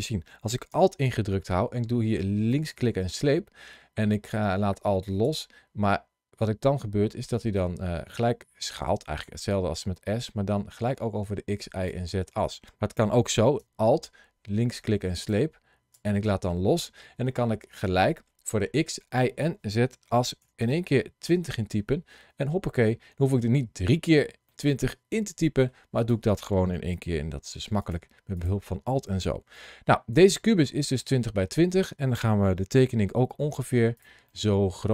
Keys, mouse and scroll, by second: 2.3 alt+click, 14.6 alt+click, 23.0 scroll down 2, 24.3 middle click, 25.8 click, 26.8 g, 27.6 click, 28.2 click, 29.4 middle click, 32.7 s, 33.8 click, 34.1 middle click.